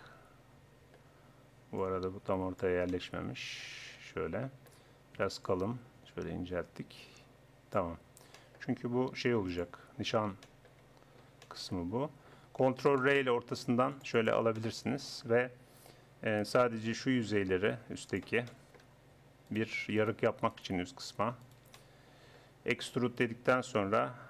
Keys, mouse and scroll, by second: 1.8-3.7 drag, 3.9 middle click, 5.4-7.2 drag, 8.4 middle click, 8.7 Tab, 9.1 Tab, 9.5 click, 10.1 middle click, 10.8 Tab, 13.0 ctrl+r, 14.6 click, 18.1-19.6 drag, 20.2-23.0 right drag, 23.0 e.